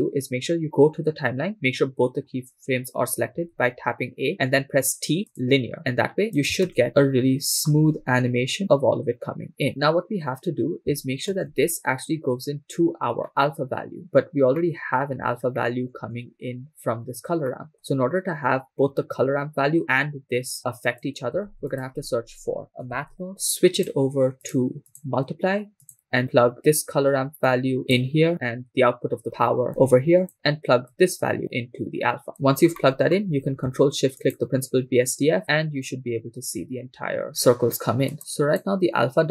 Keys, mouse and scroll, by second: 3.4 a, 4.7 t, 6.4 click, 8.0 shift+space, 11.3 shift+space, 13.3 scroll down 2, 13.3 middle click, 14.6 middle click, 16.1 middle click, 17.0-17.7 scroll down 3, 17.7 middle click, 20.6 click, 21.6 shift+a, 24.9-26.0 drag, 27.5 click, 28.3-29.7 drag, 30.2 click, 30.9-32.7 drag, 32.8 middle click, 34.4 ctrl+shift+click, 38.1 click.